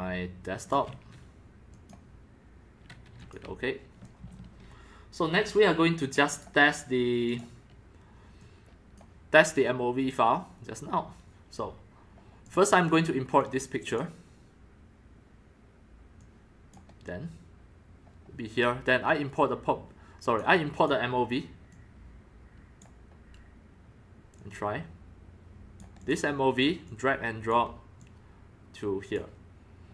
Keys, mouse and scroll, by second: 0.6 click, 1.7 click, 3.2 click, 3.9-5.1 drag, 6.3 click, 6.6 right click, 7.3 click, 7.4 right click, 8.4 click, 10.7-12.1 drag, 12.4 click, 12.8 click, 13.4 click, 14.5-16.0 drag, 16.2 click, 19.0-20.4 drag, 20.7 click, 21.2-22.8 drag, 24.3-25.8 drag, 26.0 click, 26.8 click, 27.7 click, 28.1-29.9 drag.